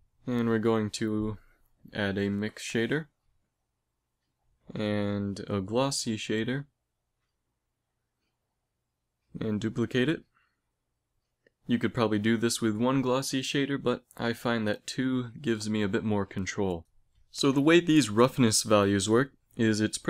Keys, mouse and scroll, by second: 0.4 middle click, 1.1 shift+a, 3.8 shift+a, 8.6 shift+d, 11.1-12.7 drag, 13.6-15.2 drag, 15.6-17.4 drag.